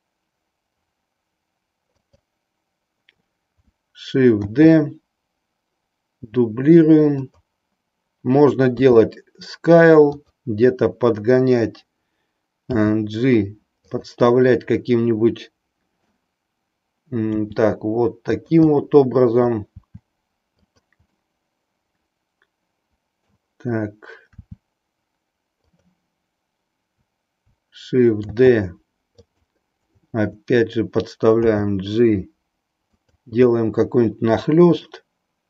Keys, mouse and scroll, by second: 4.4 shift+d, 8.8 s, 12.8 g, 14.4-16.3 middle drag, 17.4 r, 18.4 click, 18.8 middle click, 19.8 r, 20.8 click, 21.1-23.4 middle drag, 24.4 r, 28.4 shift+d, 29.3 click, 31.3 g, 33.0 click, 33.5-35.0 middle drag.